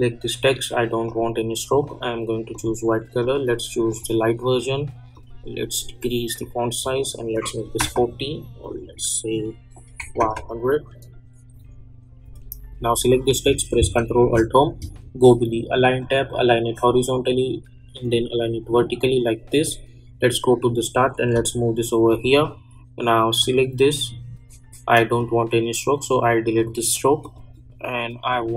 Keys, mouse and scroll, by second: 1.0-7.3 drag, 12.2 click, 14.1 ctrl+alt+Home, 15.9-21.3 drag, 21.3 [, 22.2-28.5 drag.